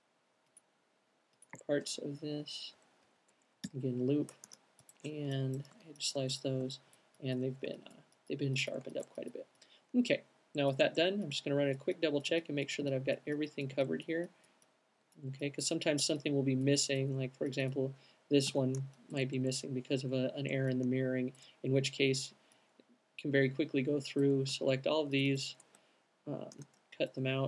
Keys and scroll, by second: 1.0 fn+Up, 2.5 Up, 3.1 Up, 3.8 l, 5.1 c, 5.8 q, 17.4 alt+super+x, 26.6 shift+super+x.